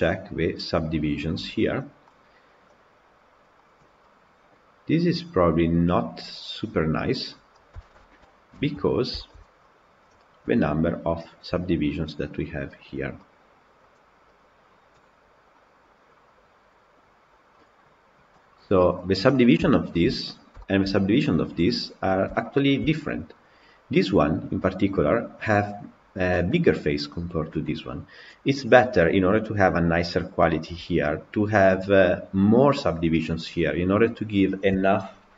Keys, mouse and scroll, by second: 3.5-3.9 drag, 3.9-6.9 middle drag, 7.3 scroll down 3, 7.7 shift+middle drag, 8.0 scroll down 2, 8.5-8.8 shift+middle drag, 8.8-9.7 scroll down 3, 9.1 shift+middle drag, 9.7 click, 10.3 KP_Decimal, 13.1-13.7 middle drag, 13.7-17.6 right drag, 17.6 click, 18.5 scroll up 1, 18.7-19.6 scroll down 5, 19.6 scroll up 1, 19.7 shift+middle click, 20.0 scroll down 1, 20.1 scroll up 3, 20.5-35.3 shift+middle drag.